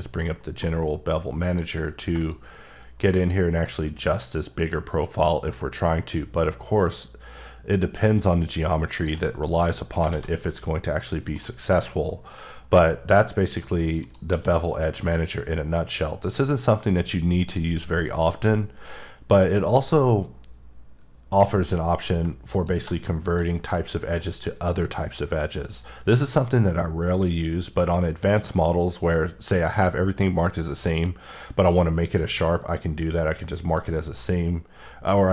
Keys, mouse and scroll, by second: 10.1 alt+a, 10.4 middle click, 11.8 middle click, 14.0 click, 14.3 q, 22.2 shift+q, 22.5 shift+click, 32.0 click.